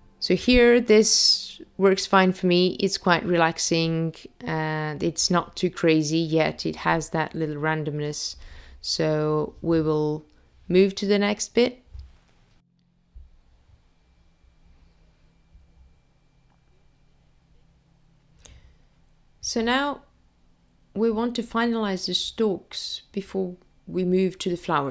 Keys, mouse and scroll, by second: 2.2 click, 3.1 space, 11.4 space, 13.6 click, 15.1 middle click, 17.5 middle click, 20.1 click, 21.9 click, 22.8 middle click.